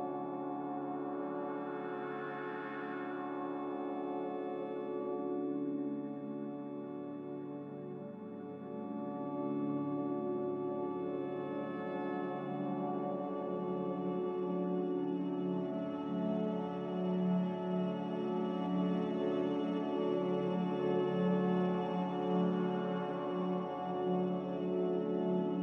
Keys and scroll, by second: 1.6 a, 3.9-4.7 typing, 10.0-11.8 typing, 15.1 a, 16.6-17.9 typing.